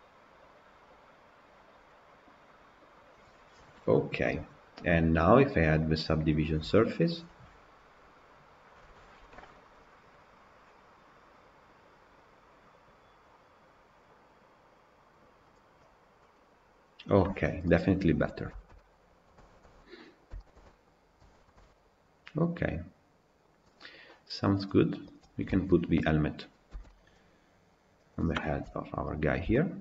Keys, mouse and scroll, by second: 2.0-15.5 drag, 16.1-19.2 middle drag, 19.2 scroll down 1, 19.3-20.9 shift+middle drag, 20.9 scroll up 2, 21.2-22.8 shift+middle drag, 22.9-24.4 middle drag, 24.4 click, 25.1 click, 25.2 scroll down 2, 25.4-26.6 shift+middle drag, 26.6 g, 28.5 KP_1, 29.0-29.4 scroll up 3, 29.4 shift+middle drag, 29.7 scroll up 2.